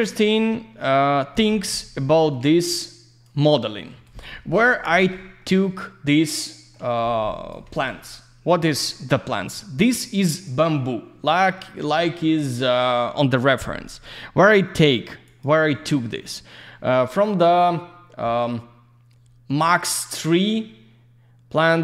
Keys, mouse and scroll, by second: 0.8 q, 1.3 click, 1.5 F4, 2.0 alt+middle click, 2.4 alt+z, 2.5 click, 3.4 alt+middle click, 3.9 alt+z, 4.1 click, 4.3 F4, 4.9 click, 5.4 alt+middle click, 6.8 alt+z, 7.0 click, 8.0 alt+middle click, 9.6 alt+middle click, 15.6 click.